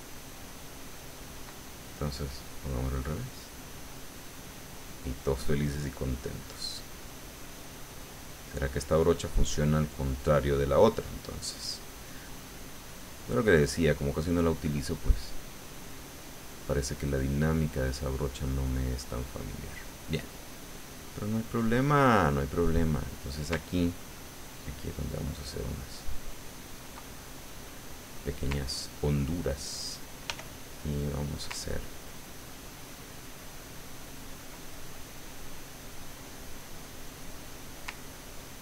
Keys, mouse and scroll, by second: 0.8 ctrl+click, 2.3 click, 3.1-5.1 drag, 5.1 click, 5.8 middle click, 6.8 middle click, 7.7-13.5 drag, 12.7 right click, 13.6-15.3 drag, 15.6 middle click, 16.5-18.2 scroll up 1, 18.2 click, 19.2 click, 20.4 click, 21.0 click, 22.5 click, 24.1-25.3 ctrl+drag, 25.4-27.0 ctrl+drag, 27.0-28.1 ctrl+drag, 28.2 click, 30.3 f, 31.0 click, 31.9-33.8 ctrl+drag, 33.8 ctrl+middle click, 34.7-36.3 ctrl+middle drag, 38.0 ctrl+click.